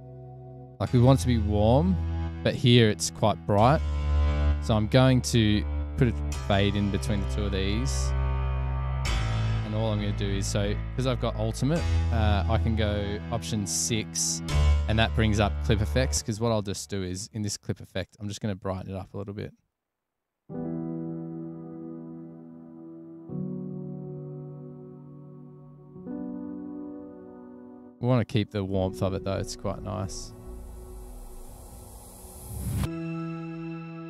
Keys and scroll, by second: 4.6 super+e, 8.1 f, 11.7 alt+6, 16.2 space, 16.4 space, 31.1 super+=.